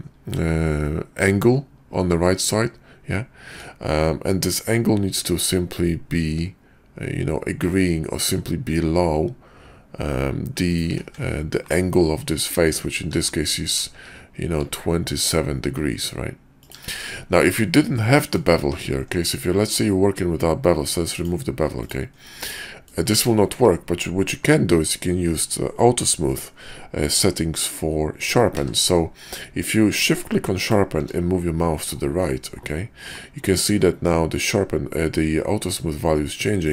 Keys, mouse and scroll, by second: 13.0 q, 17.4 middle click, 18.1 middle drag, 18.7 ctrl+`, 22.5-22.9 middle drag, 23.4 shift+middle click, 28.5 q.